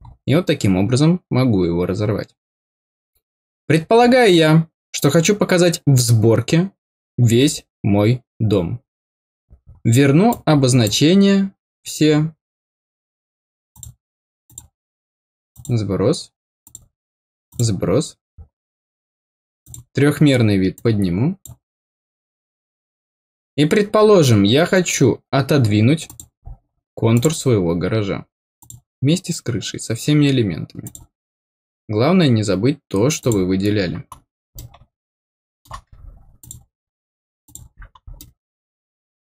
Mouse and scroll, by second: 3.3 middle click, 3.7 scroll down 2, 4.0 middle click, 4.9 middle click, 5.0-7.2 scroll down 1, 9.3-9.6 scroll down 2, 10.2 click, 13.7 click, 14.4 click, 15.5 click, 16.6 click, 17.4 click, 19.6 click, 20.7 click, 26.0 click, 27.1 click, 28.5 click, 30.8 click, 33.1 click, 34.5-35.6 middle drag, 36.3 click, 37.4 click, 38.1-39.2 middle drag.